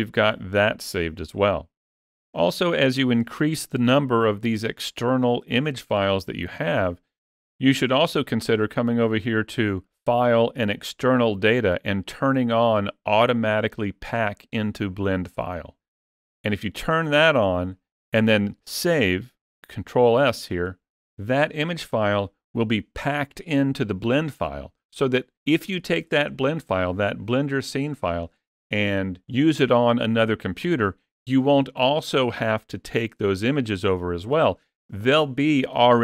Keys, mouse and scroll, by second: 8.8 click, 19.3 ctrl+s.